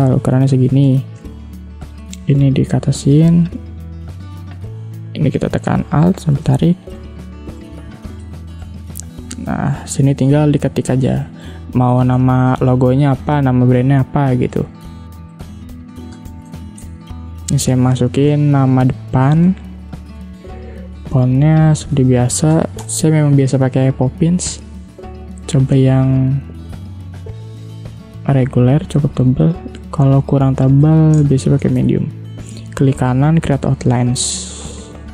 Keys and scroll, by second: 0.9 space, 1.5 v, 9.1 t, 12.4 ctrl+a, 13.6 ctrl+z, 15.2 Caps_Lock, 15.8-17.1 typing, 16.7 ctrl+Return, 21.7 p, 23.1 o, 23.3 s, 31.3 space, 34.5 i.